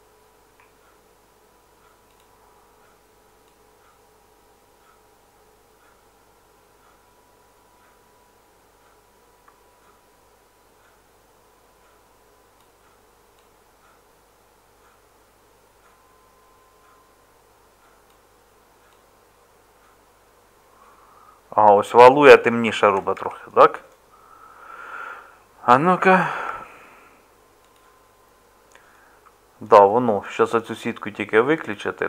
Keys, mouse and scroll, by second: 23.2 Tab, 26.5 Tab.